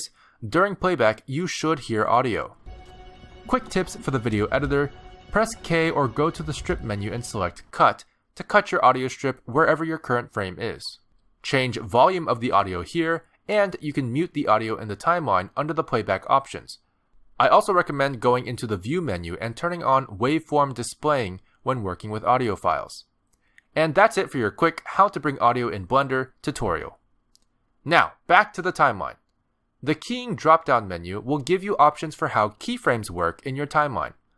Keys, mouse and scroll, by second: 2.6 space, 14.0 click, 14.8 click, 26.2 click, 27.2 space, 28.1 click.